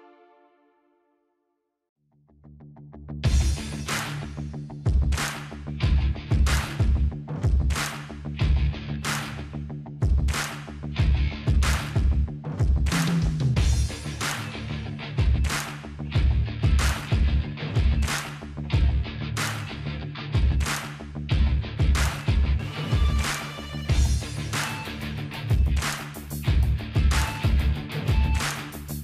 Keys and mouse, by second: 3.5 click, 7.4-8.8 middle drag, 8.2-8.5 ctrl+z, 8.7 ctrl+z, 8.8 ctrl+z, 9.0 ctrl+z, 9.3 ctrl+z, 9.4 ctrl+z, 9.6 ctrl+z, 9.8 ctrl+z, 10.2-11.3 middle drag, 10.7 click, 10.7 right click, 11.7 s, 13.2-15.1 middle drag, 14.3 s, 16.8-18.2 middle drag, 18.3-19.3 drag, 19.3 middle click, 19.5 s, 20.9 click, 21.6-22.7 middle drag, 22.1 s, 26.0 ctrl+z, 26.0-27.9 middle drag.